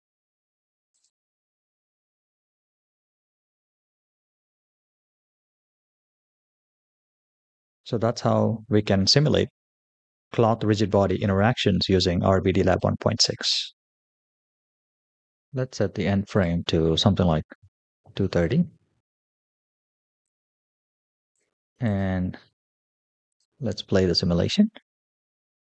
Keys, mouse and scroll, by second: 0.3 space, 0.7 click, 1.2 space, 10.2 space, 14.8-17.1 drag, 18.4 click, 18.9 click.